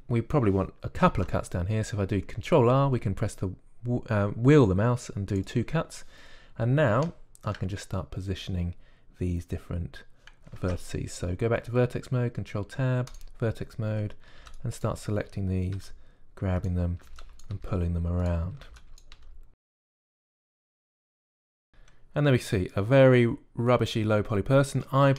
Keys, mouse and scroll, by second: 1.9 ctrl+r, 11.5 ctrl+Tab, 15.1 a, 15.3 b, 16.7 g, 17.9-21.7 typing, 23.2 middle click.